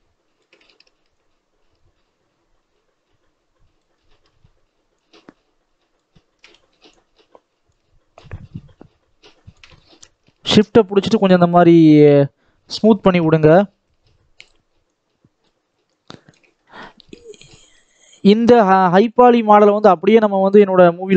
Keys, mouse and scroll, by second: 1.1-3.8 shift+drag, 3.8-4.8 shift+middle drag, 4.8-6.1 shift+drag, 6.1 shift+middle click, 6.7-9.6 shift+drag, 9.6 shift+middle click, 10.3-12.9 shift+drag, 12.9 shift+middle click, 13.7-16.4 shift+drag, 16.4-17.5 shift+middle drag, 17.5-20.5 shift+drag, 20.5 shift+middle click.